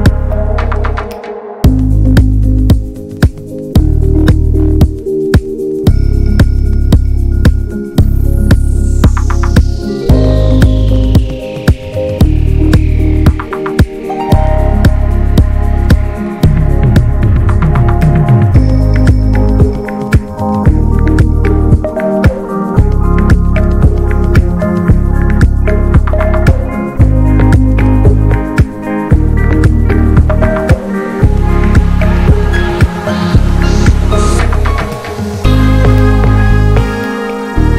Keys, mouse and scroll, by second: 2.0 middle click, 2.1 scroll up 1, 2.2 click, 3.0 Tab, 3.4 middle click, 3.6 alt+z, 3.8 middle click, 4.3 click, 4.7 /, 7.1 alt+z, 7.2 middle click, 7.9 Tab, 8.2 middle click, 8.4 Tab, 9.3 alt+h, 10.1 l, 10.6 click, 11.1 ctrl+z, 14.0-15.2 drag, 15.2 middle click, 16.0 Tab, 16.3-19.4 middle drag, 19.4 click, 19.8-20.8 middle drag, 20.8-23.8 drag, 23.8 middle click, 24.0 Tab, 24.3 middle click, 24.8 Tab, 25.0 middle click, 25.3 ctrl+s, 25.5 click, 25.6-26.3 scroll down 3, 25.8 /, 26.3 middle click, 26.8 scroll up 1, 27.0-28.3 shift+middle drag, 28.3 ctrl+s, 28.7 click, 28.9 scroll down 1, 29.0 middle click, 29.2 Tab, 29.9 l, 30.5 alt+middle click, 31.0 alt+z, 31.2-31.7 scroll up 2, 31.3 shift+middle click, 31.7 s, 32.7 shift+middle click, 33.3 click, 35.1 r, 36.4 click, 37.6 scroll down 3.